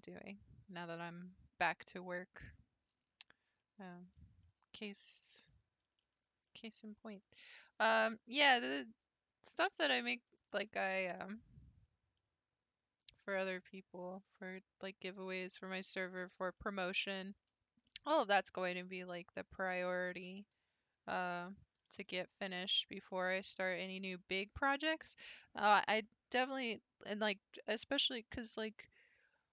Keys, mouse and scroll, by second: 3.6-8.4 middle drag, 8.4-9.0 scroll up 3, 9.5 click, 9.9-10.9 middle drag, 10.9 g, 15.6-21.4 middle drag, 21.4 click, 21.8 g, 23.4 shift+middle click, 23.6 scroll down 1, 24.0-27.1 middle drag.